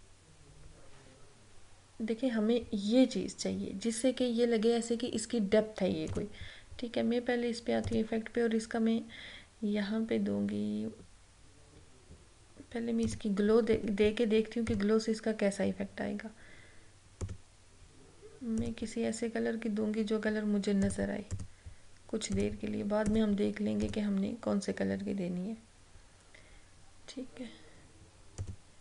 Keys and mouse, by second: 6.1 click, 13.2 click, 17.3 click, 28.4 click.